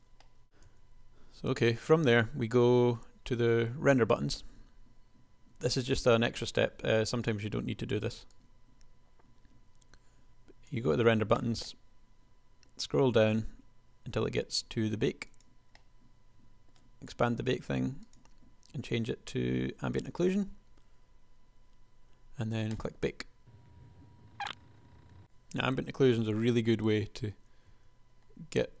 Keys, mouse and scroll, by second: 0.4 a, 0.9 a, 26.3 KP_1, 27.9 Tab.